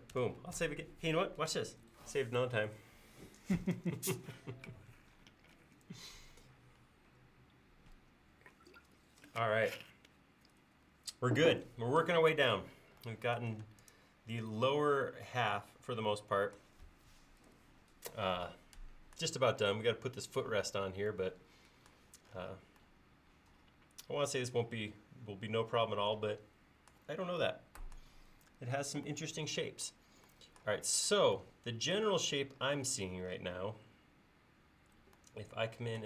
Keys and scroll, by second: 0.2 ctrl+s, 1.7 ctrl+s, 13.6 space, 32.9 l.